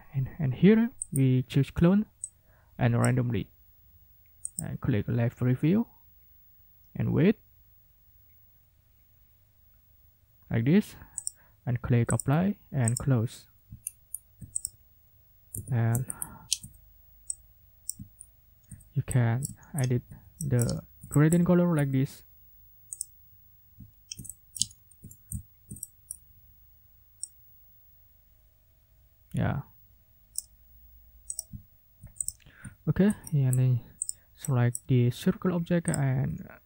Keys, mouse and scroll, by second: 1.0 click, 2.2 click, 4.4 click, 11.2 click, 12.1 click, 12.8 click, 13.8 ctrl+scroll up 2, 14.5 ctrl+click, 15.5 g, 16.0-16.5 ctrl+scroll up 2, 17.3 click, 17.9 ctrl+middle click, 18.1-18.7 ctrl+scroll down 4, 19.6-19.9 ctrl+scroll up 2, 20.7 ctrl+scroll down 2, 23.8-24.7 ctrl+scroll up 4, 24.2 ctrl+middle click, 24.7 ctrl+scroll down 2, 25.4 ctrl+scroll down 2, 25.8 ctrl+click, 27.2-30.5 drag, 31.3 ctrl+middle click, 31.7 ctrl+scroll down 2, 32.2 ctrl+click, 32.3 ctrl+middle click, 32.8 ctrl+scroll up 2, 33.2 ctrl+middle click, 34.0 click, 34.4 click, 35.9 shift+click.